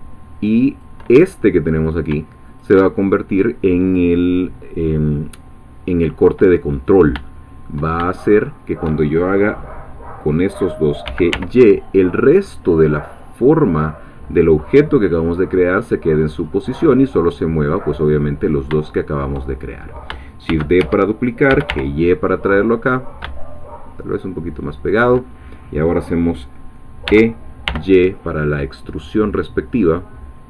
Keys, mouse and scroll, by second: 0.7 shift+click, 1.7 click, 2.6 shift+click, 6.8 click, 7.3 shift+middle click, 8.3 shift+click, 11.0 g, 11.3 y, 13.0 click, 13.5 scroll down 2, 16.2-16.6 scroll up 2, 18.4 scroll down 2, 18.9 shift+middle click, 20.5-22.2 typing, 20.8 shift+Escape, 24.8 shift+click, 27.1 e.